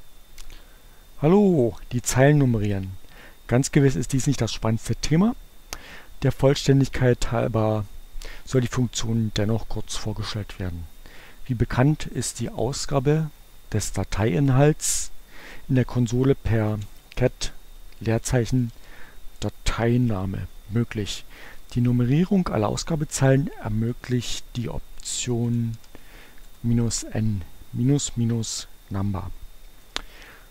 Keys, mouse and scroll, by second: 12.6 click, 14.5 click, 16.2-19.2 typing, 19.4 Return, 23.3 Up, 23.5 Left, 25.2-26.2 typing, 26.2 Return.